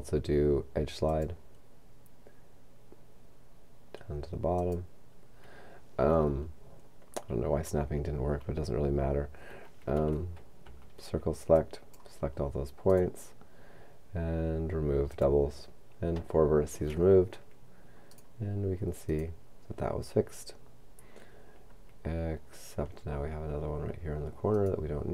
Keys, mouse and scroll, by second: 1.1 click, 4.6 click, 10.6 c, 11.6 click, 15.1 click, 18.1 right click, 24.6 right click.